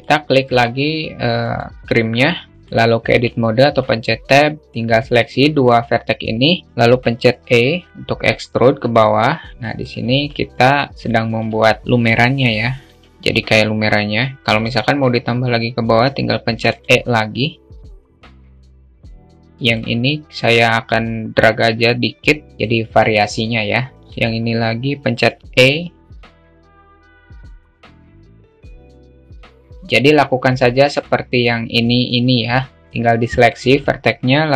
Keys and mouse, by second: 0.9-2.2 drag, 2.4 alt+middle click, 2.6 Tab, 4.6 middle click, 6.3 alt+shift+middle click, 6.9 e, 8.6-9.8 alt+middle drag, 10.0 alt+middle click, 11.1-12.3 alt+shift+middle drag, 12.3 e, 16.6-17.5 alt+middle drag, 17.9 click, 18.5 alt+middle click, 18.7 alt+middle click, 19.0-19.4 alt+middle drag, 20.4-26.3 drag, 26.4 alt+middle click, 27.4 alt+shift+middle click, 27.8 click, 28.8 middle click, 29.3-30.3 alt+middle drag, 30.6-31.6 alt+middle drag, 31.9 alt+middle click, 32.6 alt+shift+middle click, 32.8 alt+shift+click, 34.1 e.